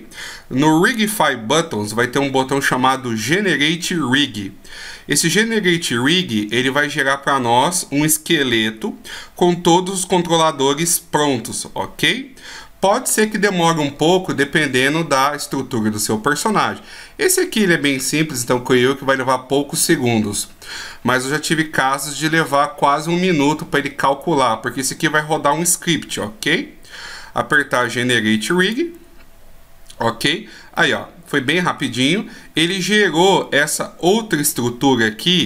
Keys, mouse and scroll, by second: 10.9-13.6 scroll down 1, 28.6 click, 30.8 middle click, 34.4 scroll down 1.